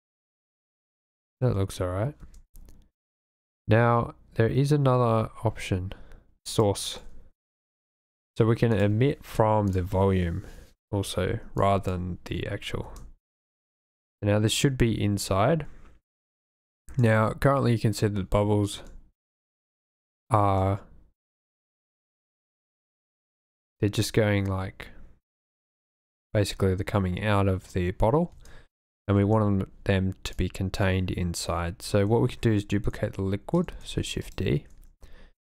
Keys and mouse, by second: 2.2 space, 6.5 click, 8.8-9.8 drag, 11.6 click, 12.9 space, 17.0 space, 18.8 space, 20.5 space, 28.3 space, 29.2 space, 30.4 click, 33.8 shift+d, 34.2 click.